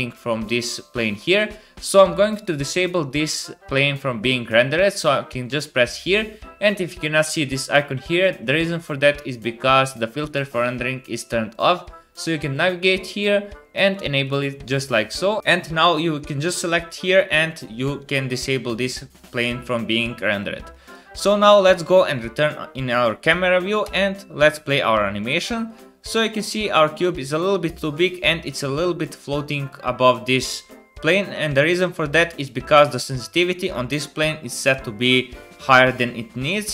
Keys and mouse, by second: 5.9 middle click, 6.0-11.5 drag, 11.5-15.4 middle drag, 15.4-16.5 drag, 16.5 middle click, 16.7 click, 16.8 middle click, 17.0-20.8 drag, 21.1 KP_0, 23.8 space, 26.4 click, 27.2 space, 30.5 click, 30.5 middle click, 30.5 right click, 33.3-36.7 drag.